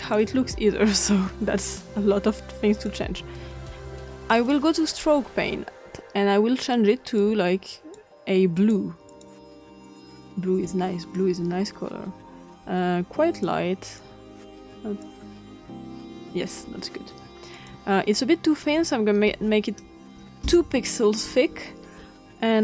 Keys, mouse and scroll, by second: 2.7 click, 4.3 click, 7.2 click, 8.5 click, 9.0 click, 11.1-13.4 drag, 13.9 click, 15.0-16.2 drag, 17.5 click, 19.2 2, 20.3 Return.